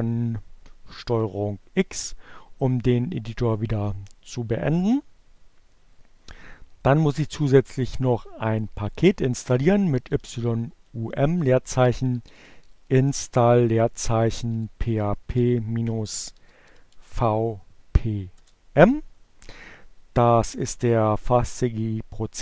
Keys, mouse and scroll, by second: 9.0-10.0 typing, 11.3-15.1 typing, 16.5 m, 16.9 Return.